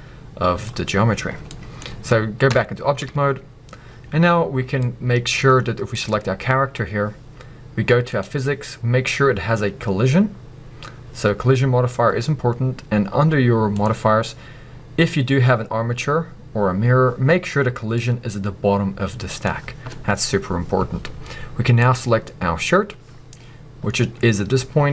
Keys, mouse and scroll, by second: 0.0-5.9 middle drag, 2.5 Tab, 5.9 click, 8.1-12.1 drag, 13.7-17.8 drag, 18.0-19.4 drag, 21.8 click.